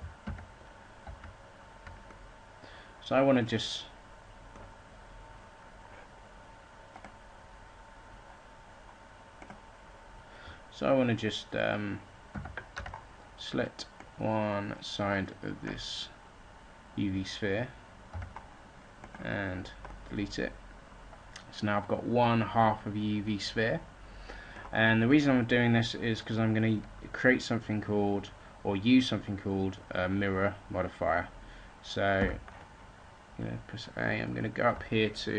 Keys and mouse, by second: 0.2 ctrl+z, 0.9 ctrl+z, 12.2 a, 12.7 b, 18.0 x, 20.2-22.9 drag, 32.1 a.